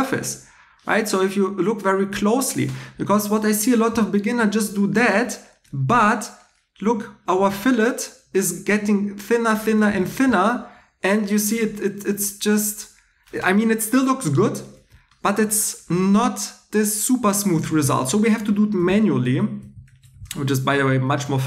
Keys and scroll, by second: 7.4 shift+e, 9.9 shift+e, 18.8 super+z, 19.2 super+z.